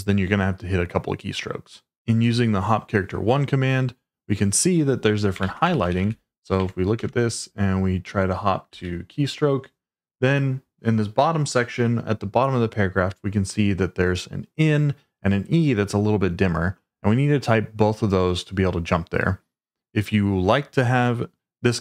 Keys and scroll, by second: 5.1-6.4 typing, 6.6 Tab, 6.9 Return, 8.6 s.